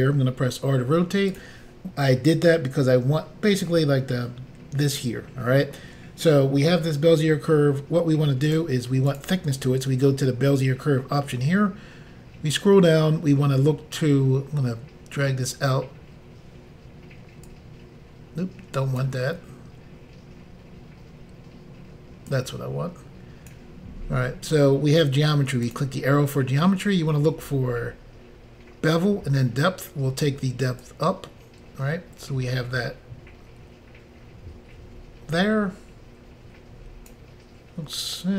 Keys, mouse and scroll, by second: 0.2 r, 1.3 click, 8.5 click, 9.1 click, 13.1 scroll down 1, 14.5 scroll down 1, 17.5 click, 22.3 click, 24.0 scroll down 2, 25.7 click, 26.4 scroll down 3, 30.9 click.